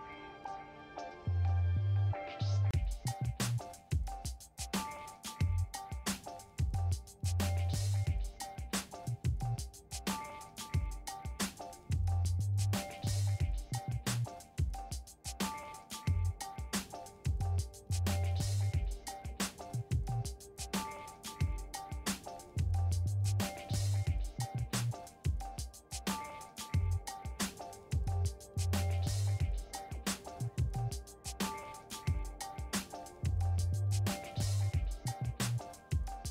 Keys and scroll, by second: 0.3-1.3 typing, 1.3 Return, 20.2 Right, 21.3 ctrl+shift+Left, 22.1-26.9 typing.